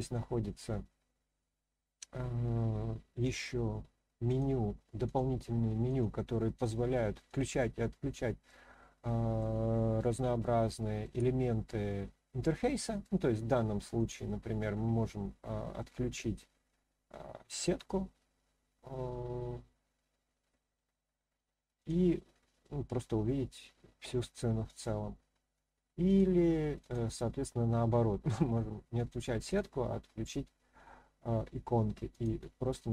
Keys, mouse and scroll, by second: 3.3 click, 5.0 click, 5.8 click, 6.5 click, 7.2 click, 8.4-9.4 middle drag, 10.4-11.0 shift+middle drag, 11.7-12.4 scroll down 1, 12.4-13.0 middle drag, 13.9 click, 16.1-20.5 middle drag, 21.8 click, 22.6-24.2 middle drag, 26.0 click, 26.8 click, 28.9 click, 29.5 click, 32.1 click.